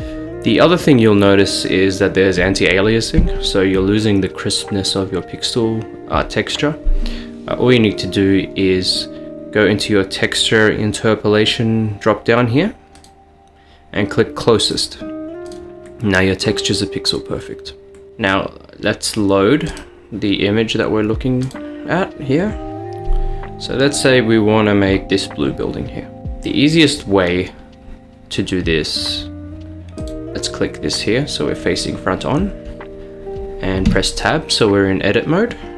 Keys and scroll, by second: 33.9 Tab.